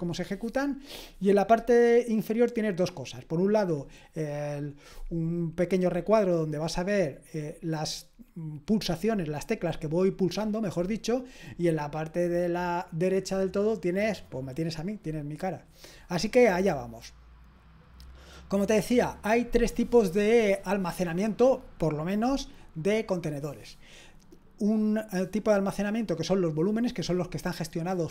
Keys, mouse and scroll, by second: 16.8-17.6 scroll down 1, 17.6-18.3 scroll down 1, 18.3-22.6 scroll up 2.